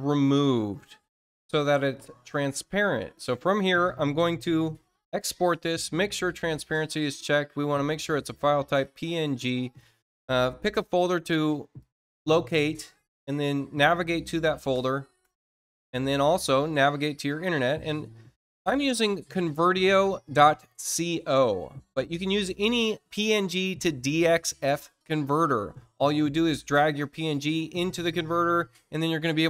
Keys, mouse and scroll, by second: 2.2 click, 2.9 click, 5.0 ctrl+alt+shift+w, 8.5 click, 11.7 click, 13.4 alt+Tab, 15.9 alt+Tab, 16.3 alt+Tab.